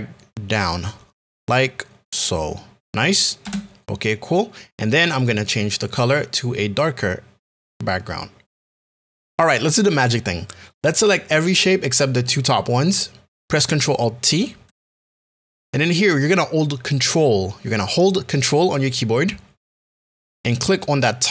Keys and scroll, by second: 3.4 Return.